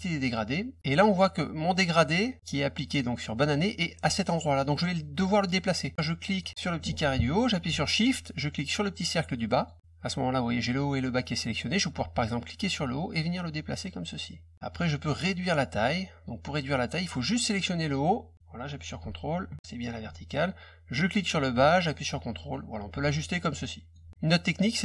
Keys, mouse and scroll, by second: 6.2 click, 9.5 shift+click, 12.7-14.5 drag, 16.5 click, 17.8-19.8 drag, 21.1-22.5 drag, 23.3 ctrl+click.